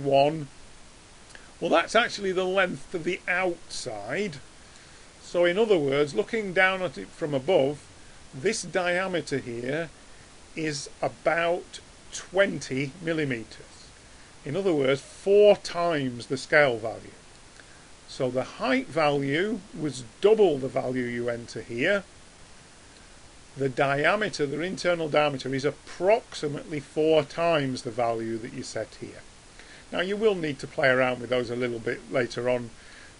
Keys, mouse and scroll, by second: 5.0-17.8 middle drag.